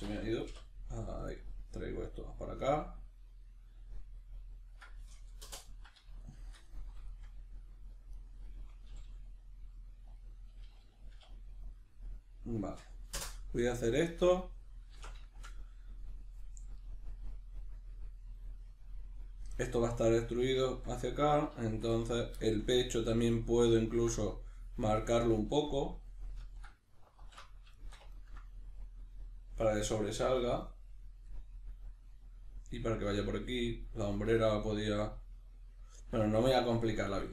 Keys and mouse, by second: 5.7-8.1 middle drag, 8.1 right click, 8.9 g, 10.2 click, 11.1 k, 13.9-37.2 middle drag, 27.1 alt+q.